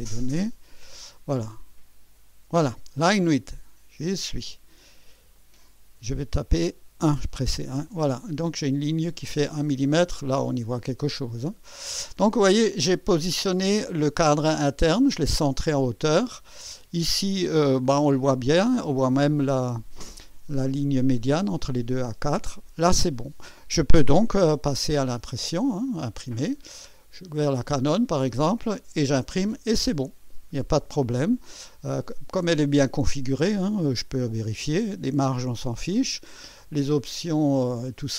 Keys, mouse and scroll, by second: 0.3 click, 1.4 scroll down 2, 2.0-2.4 scroll down 2, 5.4 click, 7.0 1, 7.9 Return, 10.4-11.1 scroll up 2, 12.1 scroll up 1, 26.2 click, 33.8 click, 36.5 click.